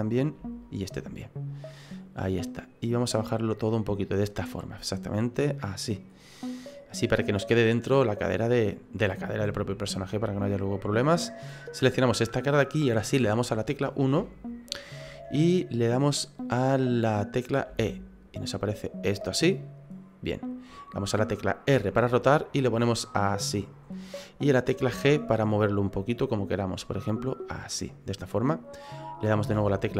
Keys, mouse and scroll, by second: 0.6 shift+right click, 1.0 middle click, 2.8 click, 6.1-6.5 scroll down 4, 6.5 middle click, 10.6 middle click, 11.7 right click, 12.3 middle click, 13.2 KP_1, 14.2 shift+middle click, 17.7 e, 21.7 r, 24.8 g, 29.4 e.